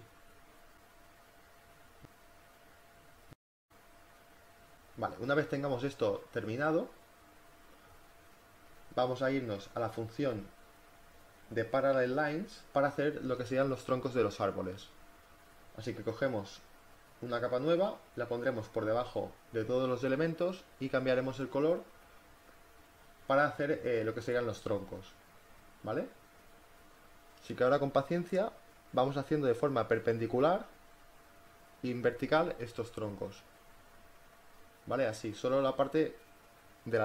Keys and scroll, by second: 2.8 ctrl+z, 3.4 ctrl+z, 12.7 space, 15.9 space, 27.5 ], 29.1 ctrl+z, 34.1 ctrl+z.